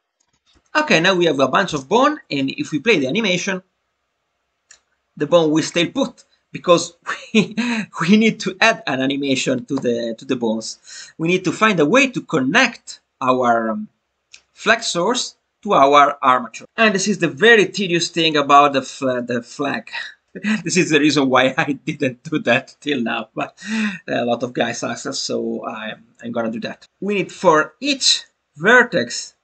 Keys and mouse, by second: 0.3 click, 0.4 middle click, 0.5 Tab, 17.5-18.2 drag, 19.1 click, 19.8 click, 27.5 shift+middle click.